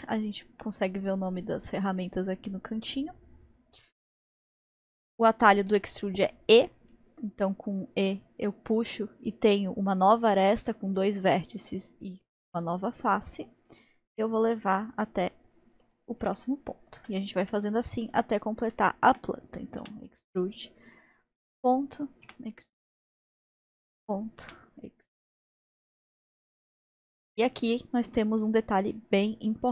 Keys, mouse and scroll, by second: 5.7 e, 15.0-19.8 middle drag, 19.8 e, 21.2-22.3 scroll up 4, 22.3 e, 23.5-24.2 scroll down 2, 24.2 scroll down 2, 24.4 e, 25.6-29.7 middle drag.